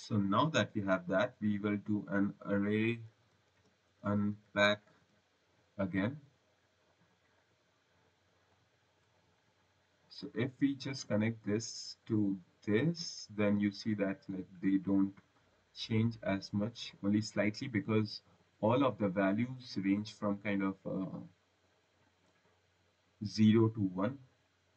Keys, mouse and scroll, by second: 0.8 scroll, 1.8 click, 2.4-5.1 typing, 7.3 click, 8.4 click, 9.1 scroll, 9.8 right click, 11.5 click, 15.9 right click, 17.7 click, 18.3 click, 19.3 click, 21.7 click, 24.3 click.